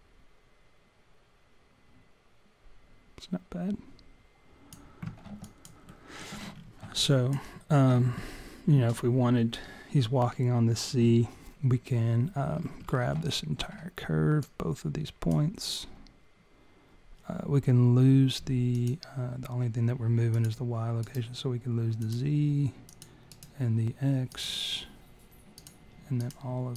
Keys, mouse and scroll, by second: 5.5 alt+click, 5.9 alt+middle click, 6.5-7.1 scroll up 4, 7.1 alt+click, 13.0 scroll down 10, 13.3 alt+middle click, 14.4 click, 19.0 click, 20.6 click, 21.0 right click, 22.9 click, 23.3 right click, 25.6 click, 26.2 shift+click.